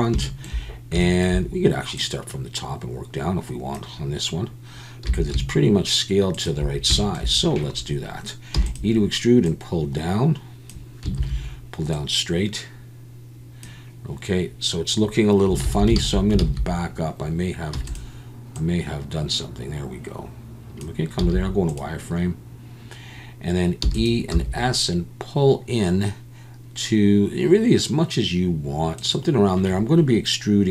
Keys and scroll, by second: 5.0 s, 8.5 e, 11.2 ctrl+z, 15.6 ctrl+z, 16.0 ctrl+z, 16.4 ctrl+z, 17.7 e, 21.2 z, 23.8 e, 24.3 s.